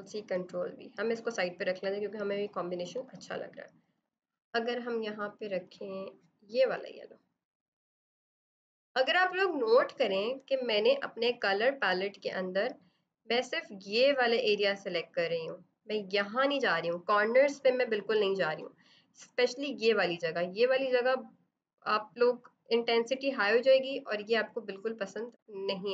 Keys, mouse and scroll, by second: 0.2 click, 10.3 click, 24.1 click.